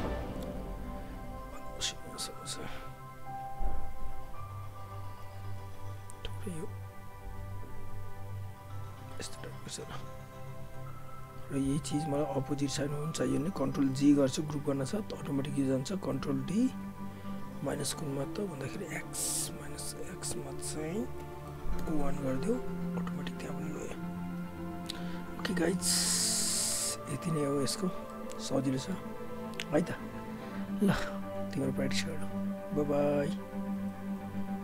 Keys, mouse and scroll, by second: 0.2 w, 0.8 click, 2.6 alt+right click, 4.0 alt+click, 5.7 alt+right click, 6.9 click, 8.6 right click, 9.3 click, 9.6 alt+right click, 10.0 alt+click, 11.3 alt+right click, 11.5 alt+click, 14.0 ctrl+g, 14.7 alt+click, 16.1 ctrl+d, 18.2 alt+click, 21.8 Return, 22.7 alt+click, 27.3 alt+right click, 27.8 alt+click, 28.1 alt+middle click, 29.6 alt+click, 31.6 alt+right click, 32.1 alt+Tab, 33.7 click.